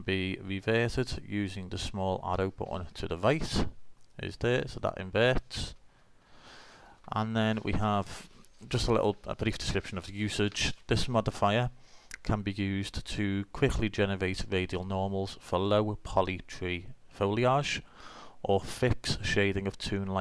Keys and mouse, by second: 4.0 click, 6.7 middle click.